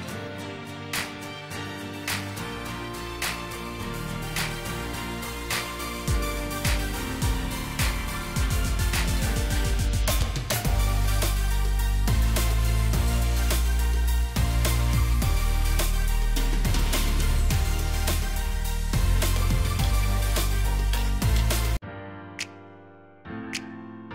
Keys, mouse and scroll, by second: 0.1-0.6 alt+scroll up 1, 12.3 right click, 13.9 double click.